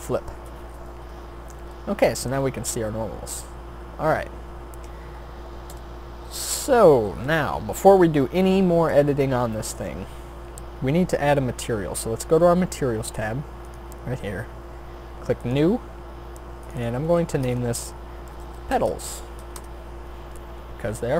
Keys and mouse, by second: 1.0 Tab, 5.7 KP_7, 7.2 Tab, 10.8-18.7 drag, 18.7-21.1 middle drag.